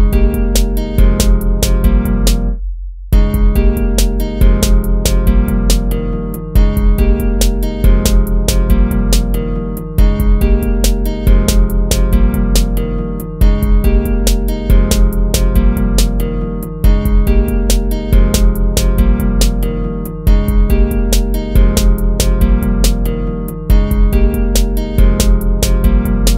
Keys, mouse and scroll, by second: 0.0 ctrl+-, 0.6 ctrl+-, 0.9 ctrl+-, 3.4 ctrl+-, 4.2 ctrl+-, 7.4 ctrl+z, 8.1 ctrl+-, 9.2 ctrl+-, 10.3 ctrl+-, 11.2 ctrl+-, 13.7 ctrl+-, 14.7 ctrl+-, 18.0 ctrl+-, 19.5 ctrl+-, 19.8 ctrl+-, 20.8 ctrl+-.